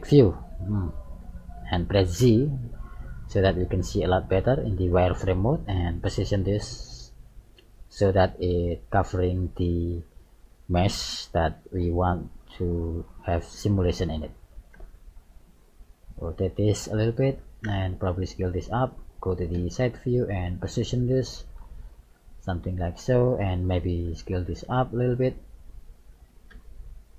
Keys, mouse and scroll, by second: 0.4 shift+middle click, 1.1 scroll down 2, 2.2 z, 6.4 g, 14.8 r, 17.7 s, 19.6 KP_3, 21.4 click, 24.1 s, 26.5 KP_1.